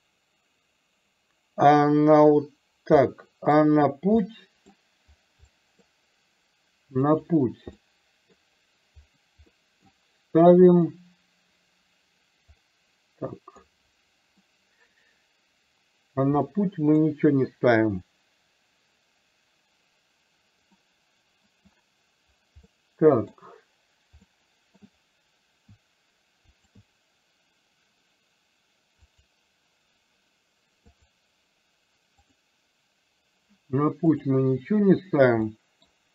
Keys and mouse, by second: 3.2-3.7 middle drag, 4.2-4.7 middle drag, 5.6-6.0 middle drag, 7.2 click, 8.0-8.3 middle drag, 9.6 middle click, 10.9 click, 12.7 middle click, 14.5 middle click, 16.6 middle click, 20.8-21.7 middle drag, 22.7-23.5 middle drag, 24.3-24.8 middle drag, 26.7 shift+click, 29.2 click, 31.0-34.4 drag, 35.6 middle drag.